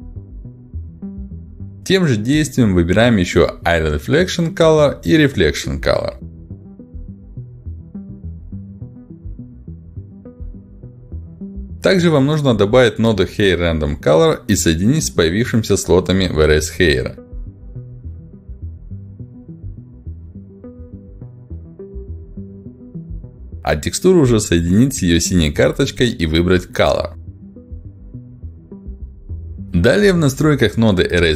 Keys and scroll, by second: 7.2 ctrl+z, 14.4 r.